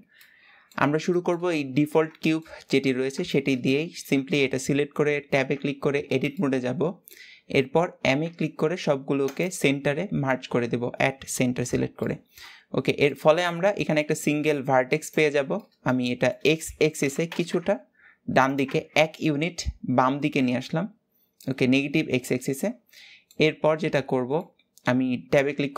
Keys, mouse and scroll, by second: 0.9-1.5 scroll up 2, 1.5-3.6 shift+middle drag, 3.6 Tab, 4.6-6.3 middle drag, 6.3 m, 8.9 scroll up 2, 10.3-12.1 shift+middle drag, 12.1 g, 13.8-15.3 middle drag, 15.3 g, 18.7 Tab, 19.3 scroll down 2, 19.7-21.7 middle drag, 21.7-22.2 scroll up 2, 22.2-22.9 middle drag, 22.9-24.4 scroll up 1, 24.4-25.7 scroll up 1.